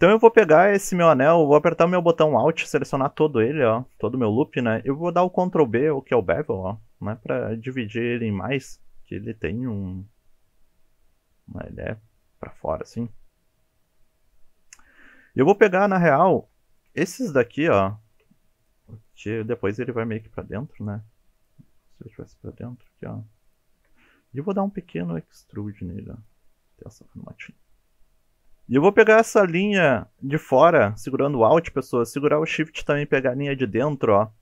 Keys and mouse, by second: 2.1 alt+click, 5.4 ctrl+b, 7.0 click, 11.9 middle click, 12.6 shift+middle click, 13.4-14.8 middle drag, 16.4 3, 16.8 click, 17.3 shift+click, 17.6 shift+click, 19.4 shift+click, 20.1 shift+click, 20.6 shift+click, 22.7 shift+click, 23.4 shift+click, 23.9 middle click, 24.7 middle click, 25.3 e, 26.1 click, 26.5-28.4 middle drag, 28.4 ctrl+z, 28.5 middle click, 29.5 alt+click, 33.1 alt+shift+click.